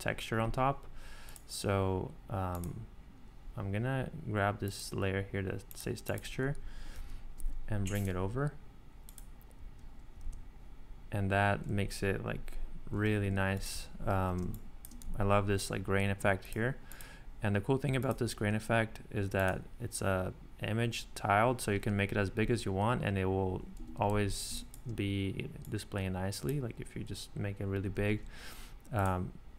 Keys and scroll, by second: 6.9 super+c, 10.2 super+v, 13.2 ↺, 14.4 space, 23.8 Escape, 24.5 space, 27.9 super+z.